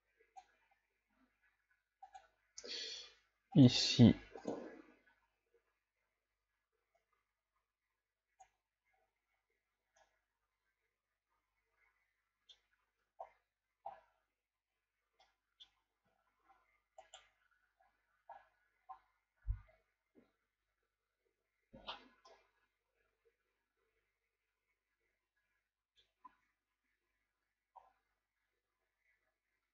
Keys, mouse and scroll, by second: 4.5 click, 9.1-9.8 scroll down 4, 10.0-13.5 middle drag, 13.5 ctrl+scroll down 2, 13.9-14.2 scroll up 4, 15.0 scroll down 3, 15.4 middle click, 16.1-16.5 shift+scroll down 2, 16.5 scroll up 3, 17.0 right click, 22.4-25.3 middle drag, 26.3 a, 27.9-28.3 scroll down 4.